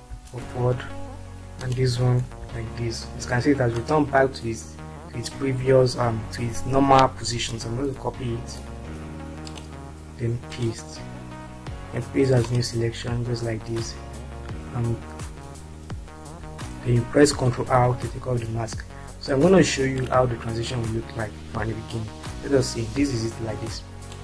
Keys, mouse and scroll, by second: 0.1 Up, 2.7 Right, 3.9-5.1 drag, 7.8 ctrl+c, 9.7 click, 13.9 click, 18.4 ctrl+r, 24.1 click.